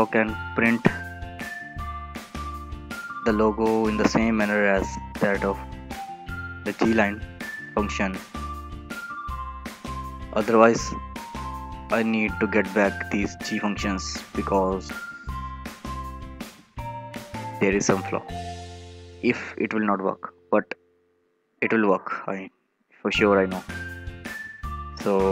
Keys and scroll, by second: 0.6 ctrl+v, 6.0 ctrl+v, 12.5 ctrl+c, 13.8 ctrl+v.